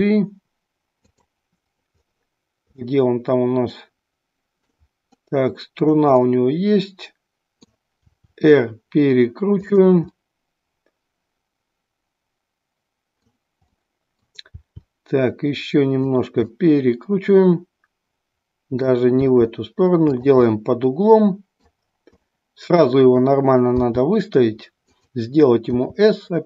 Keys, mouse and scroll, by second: 1.2 click, 3.0-4.9 middle drag, 6.3-7.9 middle drag, 8.1 r, 10.2-13.3 middle drag, 13.8 middle click, 14.5 r, 16.1 click, 16.5-18.9 middle drag, 19.3 r, 20.1 drag, 20.6-21.8 middle drag, 22.2-22.9 middle drag, 23.9 g, 25.0 click, 25.7 s.